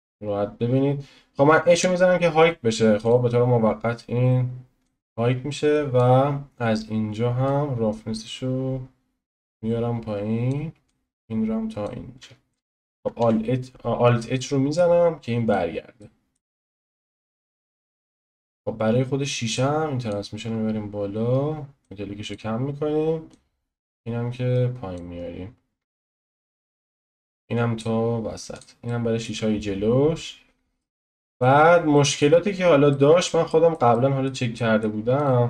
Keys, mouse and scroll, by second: 0.0 n, 1.7 h, 3.0 click, 4.8-10.5 drag, 10.9-13.2 drag, 13.2 alt+h, 14.3-15.4 middle drag, 15.4 click, 16.0-17.6 middle drag, 17.6 click, 18.3-18.7 scroll down 7, 19.5 click, 20.4 scroll up 2, 21.2-21.8 scroll up 4, 21.8-28.0 drag, 28.0-28.5 scroll down 3, 28.5 click, 28.8-29.5 middle drag, 29.5-30.8 scroll up 2, 30.8 shift+middle click, 31.6 scroll down 1, 31.7 scroll up 1, 31.9-32.4 shift+middle drag, 32.4-32.9 scroll down 1, 32.9-35.2 middle drag, 35.2 click.